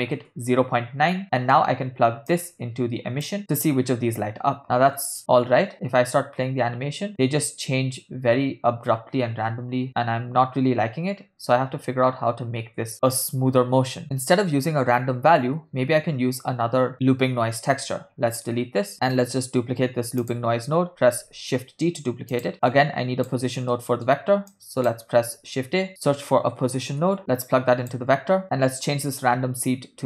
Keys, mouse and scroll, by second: 1.2 middle click, 2.4-3.4 drag, 5.2 space, 12.9 space, 14.0 middle click, 14.0 click, 18.9 x, 19.3 middle click, 20.4 click, 21.0 shift+d, 22.5 ctrl+middle click, 22.8 click, 23.9-24.3 middle drag, 24.8 click, 25.5 shift+a, 27.2 click, 29.3-30.0 drag.